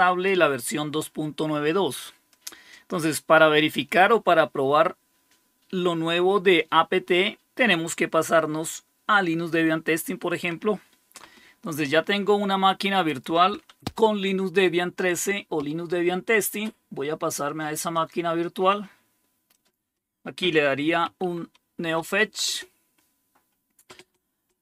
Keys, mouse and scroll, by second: 2.2-9.5 drag, 13.0 click, 14.3-15.0 typing, 17.8 click, 18.0 click, 18.1 click, 19.4 click, 20.7-22.3 typing.